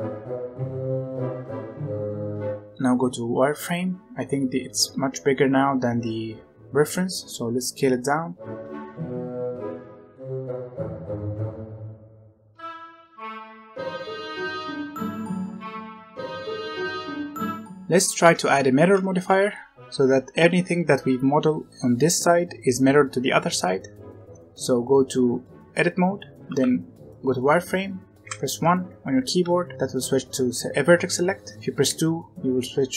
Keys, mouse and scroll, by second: 0.1 alt+click, 0.5 middle click, 0.8 alt+shift+click, 0.9 right click, 1.3 middle click, 1.8 Tab, 2.1 Tab, 2.2 Tab, 2.3 z, 6.8 s, 8.3-15.6 typing, 9.5 alt+a, 10.4 alt+a, 10.6 alt+click, 11.4 alt+a, 11.9 shift+middle click, 12.0 alt+a, 12.7 middle click, 13.8 alt+click, 14.2 shift+middle click, 15.5 alt+click, 16.1 middle click, 16.4 Tab, 16.5 middle click, 17.0-17.4 scroll up 1, 17.9 Left, 18.2 Tab, 18.9 Tab, 19.2 z, 22.7-23.9 middle drag, 24.3-26.4 middle drag, 24.3 z, 26.4 z, 27.2 middle click, 28.2 1, 28.4-29.4 middle drag, 29.4 alt+a, 29.8 right click, 31.8 2.